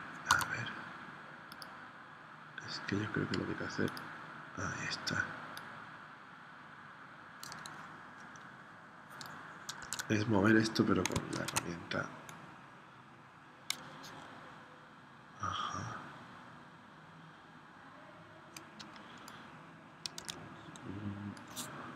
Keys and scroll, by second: 0.3 a, 9.8 super+z, 11.3 shift+c, 20.2 super+z.